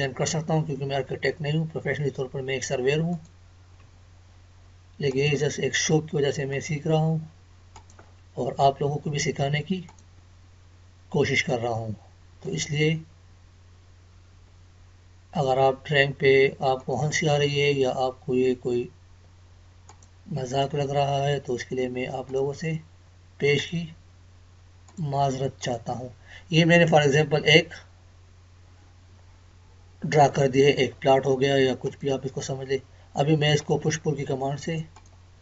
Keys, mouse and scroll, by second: 3.1 click, 3.8 Escape, 5.1 click, 16.8 click, 20.3 Escape, 22.2 click, 25.9 Escape, 28.3 scroll down 1, 29.0 scroll down 1, 31.8 click.